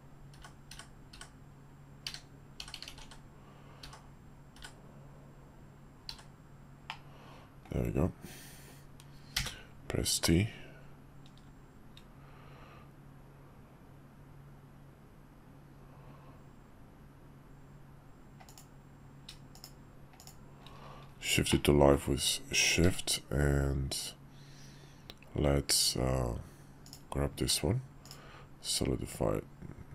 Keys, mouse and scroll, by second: 7.1-20.2 middle drag, 20.2 shift+click, 21.5-21.9 middle drag, 22.8 q, 27.4 q.